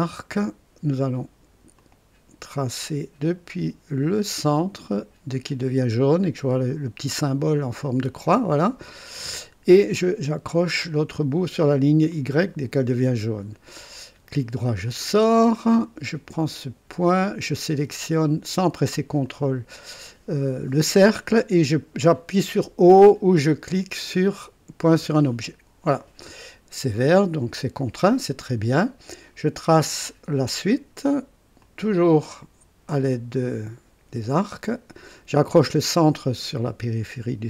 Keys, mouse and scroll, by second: 1.7 click, 8.0 click, 12.0 click, 14.8 right click, 16.8 click, 19.2 click, 24.9 o, 31.6 click, 35.4 click.